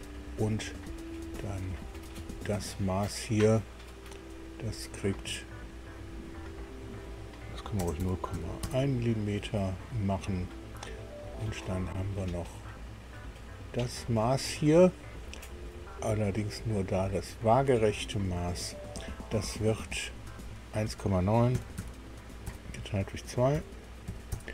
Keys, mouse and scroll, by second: 1.9 click, 6.3 click, 7.8 KP_0, 8.0 KP_Decimal, 8.3 KP_1, 8.6 KP_Enter, 13.1 click, 14.1 click, 18.1 click, 20.4 click, 21.5 KP_1, 21.7 KP_Decimal, 22.5 KP_9, 23.5 KP_Divide, 24.1 KP_2, 24.3 KP_Enter.